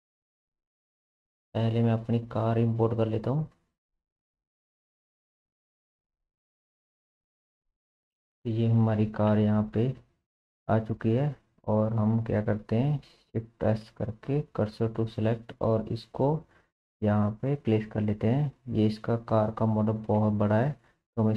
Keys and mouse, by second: 0.7-10.6 drag, 10.6-16.0 middle drag, 13.7 shift+s, 16.0 click, 16.2-18.5 middle drag, 16.9 shift+s, 18.5 s, 18.7 middle click, 20.2-21.3 middle drag, 20.2 s.